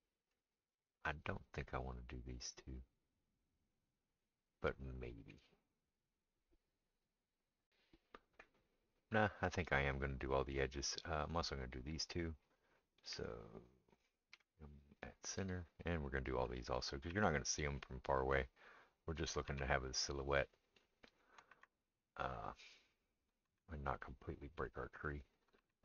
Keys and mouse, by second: 14.3 m, 17.1 shift+r, 19.5 shift+r, 21.5 shift+r, 23.4 shift+r, 25.6 shift+r.